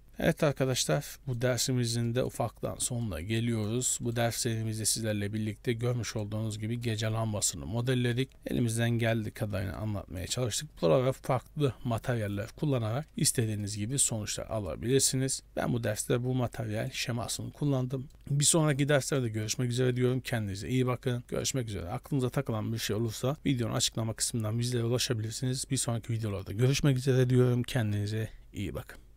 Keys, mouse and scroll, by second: 0.0 middle click, 0.1-0.6 scroll up 2, 0.6 shift+middle click, 1.1 middle click, 1.9 shift+middle click, 2.2 middle click, 2.4-3.3 scroll up 6, 3.1 middle click, 4.0 shift+middle click, 4.3-4.8 scroll up 5, 5.1 middle click, 6.6 scroll down 3, 6.9 middle click, 8.3 scroll down 1, 8.6 shift+middle click, 9.5-9.8 scroll down 2, 9.8 shift+middle click, 12.6-12.9 scroll down 4, 13.0 middle click, 13.0 scroll up 1, 13.4 shift+middle click, 13.7 middle click, 13.9-14.7 scroll up 4, 14.8 shift+middle click, 15.1-15.5 scroll up 2, 15.4 middle click, 17.0-17.5 scroll up 1, 17.5-18.5 scroll down 9, 18.1 middle click, 18.8 middle click, 22.9-23.6 scroll up 4, 23.3 shift+middle click.